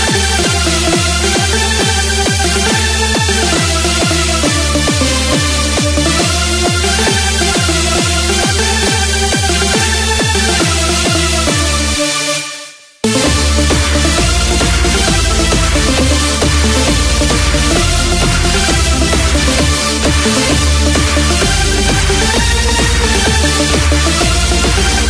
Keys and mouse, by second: 2.3-6.3 drag, 14.3-18.3 drag, 23.6-25.0 drag.